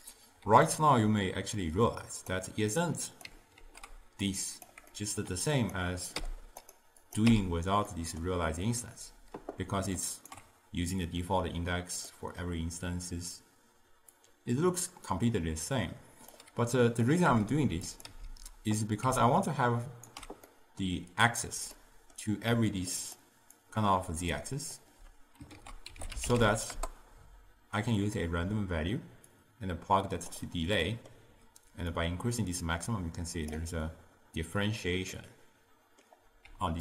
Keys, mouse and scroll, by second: 1.8 click, 2.9 click, 3.7 ctrl+h, 4.3 click, 5.0-5.7 middle drag, 5.7 click, 6.2 m, 6.7-7.2 drag, 7.4 m, 7.9-10.0 middle drag, 10.0 ctrl+alt+right click, 12.2-14.2 middle drag, 14.2-17.2 drag, 17.4 m, 17.9 click, 18.2 m, 19.5 ctrl+alt+right click, 20.6-22.6 middle drag, 22.6 d, 23.0 click, 23.2-24.3 d, 23.7 click, 23.9 d, 24.4 click, 24.8 d, 25.6 ctrl+a, 29.4-30.9 drag, 30.9-32.0 middle drag, 32.0-35.1 drag, 35.2-36.6 middle drag, 36.6 d.